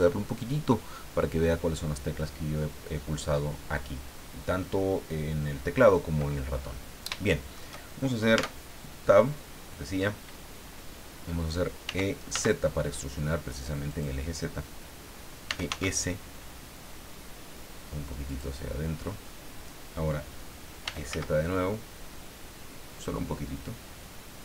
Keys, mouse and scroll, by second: 6.6 scroll up 2, 7.3 shift+middle click, 8.3 Tab, 11.8 e, 12.3 z, 13.9 click, 15.2-16.2 typing, 18.3 click, 19.0 scroll up 2, 20.6-21.6 typing.